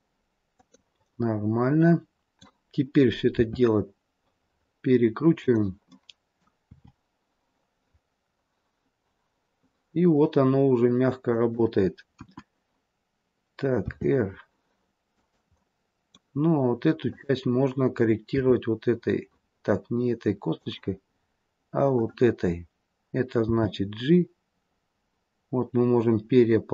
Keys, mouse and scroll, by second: 1.0 middle click, 3.3 r, 5.8 middle click, 6.6 r, 12.1 KP_1, 13.8 r, 15.5 middle click, 16.9 click, 18.2 r, 21.8 click, 23.4 g.